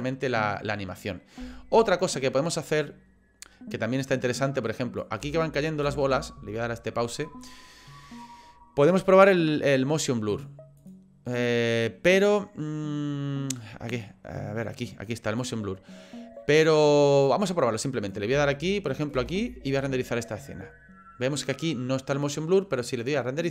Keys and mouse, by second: 0.0 click, 1.8-5.0 drag, 5.2 space, 6.0 space, 10.3 click, 10.8 click, 11.4 click, 13.9 click, 15.4 click, 17.3 click, 18.5 space, 19.2 space, 23.0 click.